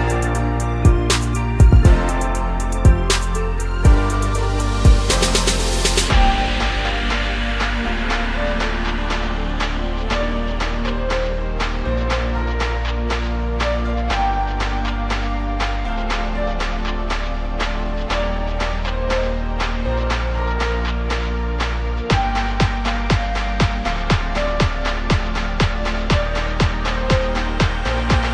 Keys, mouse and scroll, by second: 1.0 click, 1.4 scroll down 1, 1.6-2.9 middle drag, 2.9 click, 3.3-3.7 scroll up 1, 3.9 click, 4.4 scroll up 2, 5.3 click, 5.9 scroll up 1, 7.4-8.0 scroll up 1, 8.0 s, 11.9-13.0 scroll down 2, 13.0 drag, 13.3-15.2 middle drag, 15.2 drag, 16.0 click, 16.3-16.8 middle drag, 16.8 scroll up 2, 17.3 s, 19.3-19.7 scroll down 2, 19.7 click, 20.4 click, 21.3 shift+click, 22.5 KP_1, 23.5 ctrl+KP_2, 24.0 ctrl+KP_2, 24.1 ctrl+KP_2, 25.0 scroll up 1, 25.3 Tab, 27.0 click.